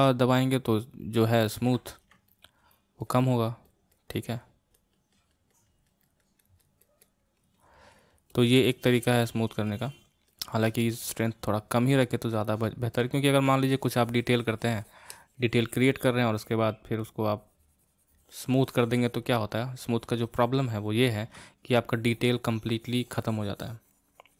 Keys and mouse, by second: 0.1-1.6 drag, 1.6 ctrl+z, 2.3-13.1 shift+drag, 13.1 middle click, 13.8-24.3 drag.